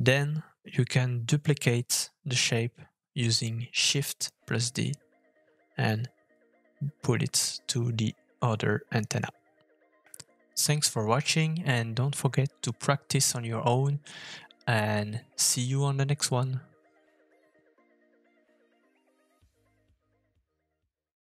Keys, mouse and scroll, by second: 1.3 g, 2.2 middle click, 2.4 shift+middle click, 2.4 scroll up 1, 2.5 shift+middle click, 2.6 KP_1, 2.9 g, 3.2 middle click, 4.8 middle click, 4.9 scroll up 2, 5.0 shift+middle click, 5.2 scroll down 2, 5.4 middle click, 5.4 scroll down 3, 5.6 middle click, 6.4 middle click, 6.8 shift+middle click, 6.8 f, 7.3 KP_1, 7.4 KP_3, 9.9 shift+middle click, 9.9 scroll up 3, 10.0 shift+middle click, 11.0 middle click, 11.2 shift+middle click, 11.6 middle click, 11.7 scroll up 4, 11.8 shift+middle click, 11.9 shift+middle click, 13.9 f, 14.5 middle click, 14.6 ctrl+z, 15.2 shift+middle click, 15.7 click, 15.9 Delete, 16.0 click, 16.5 middle click, 16.7 shift+d, 16.7 KP_3, 16.8 shift+middle click, 16.9 g, 17.4-17.8 scroll down 6, 17.6 middle click, 17.7 shift+middle click, 17.8 click, 18.0 shift+middle click, 18.1 middle click, 18.7 shift+middle click, 18.8 middle click, 19.8 shift+middle click, 20.0 shift+middle click, 20.1 middle click, 20.2 shift+middle click.